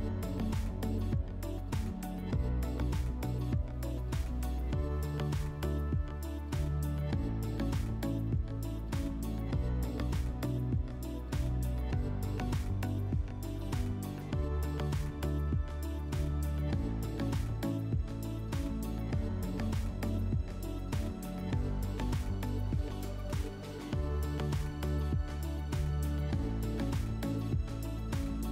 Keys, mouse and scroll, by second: 9.1-9.7 drag, 11.7 click, 14.0-14.9 drag, 16.2 click, 18.5 click, 22.9-24.3 drag.